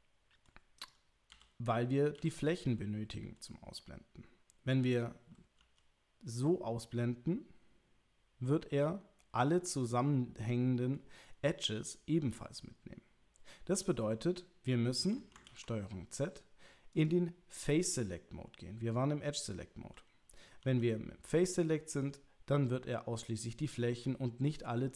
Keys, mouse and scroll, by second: 0.8 click, 2.2 l, 2.8 middle click, 5.6 h, 6.4-8.5 middle drag, 11.0 middle click, 13.5 middle click, 15.5 ctrl+z, 16.9 click, 20.6 h, 21.5-24.8 middle drag.